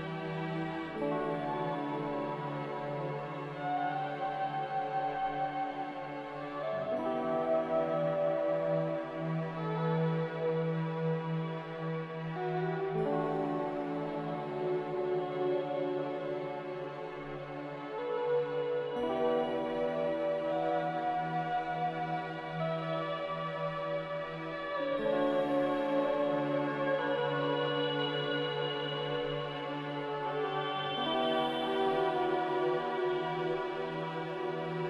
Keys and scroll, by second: 1.2 s, 2.7-5.2 typing, 6.5-7.2 typing, 8.7 Return, 9.7 z, 31.6 n.